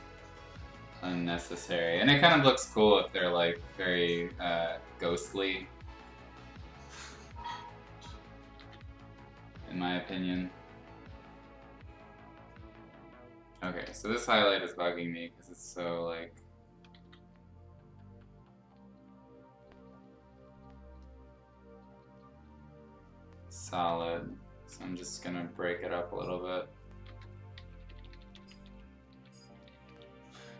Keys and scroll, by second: 1.1 ctrl+z, 1.3 ctrl+z, 3.8 ctrl+z, 8.5 ctrl+z, 10.0 ctrl+z, 14.1 b, 14.8 x, 15.7 ctrl+z, 16.9 ctrl+z, 23.8 x, 24.8 ctrl+z, 27.0-29.9 typing.